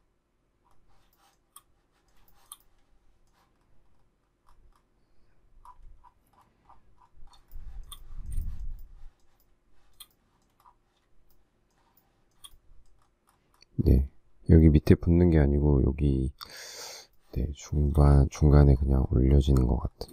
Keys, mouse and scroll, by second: 1.1 shift+middle click, 2.3 shift+middle click, 2.5 shift+middle click, 7.5 shift+middle click, 8.4 shift+middle click, 8.8 shift+middle click, 9.4 shift+middle click, 11.3 shift+middle click, 12.0 shift+middle click, 17.1 shift+middle click, 17.7 shift+middle click.